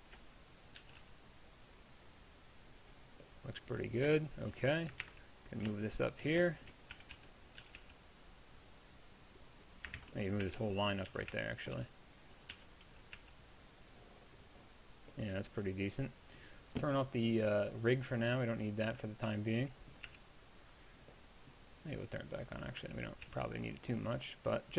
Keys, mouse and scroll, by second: 0.7-3.4 drag, 0.8 g, 5.0 ctrl+Tab, 5.8-7.0 shift+drag, 7.0 a, 7.2 b, 7.6 g, 10.0 ctrl+z, 10.5 a, 10.6 b, 11.1 g, 18.9 click, 18.9 z, 19.3 z, 20.1 Tab, 22.8 Tab, 23.3 z.